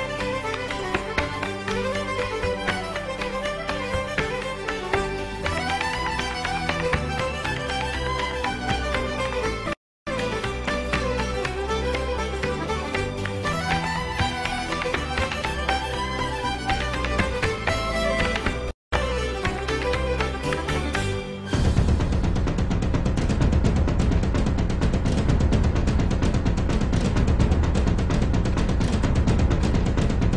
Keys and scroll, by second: 2.3 super+BackSpace, 5.0 super+d.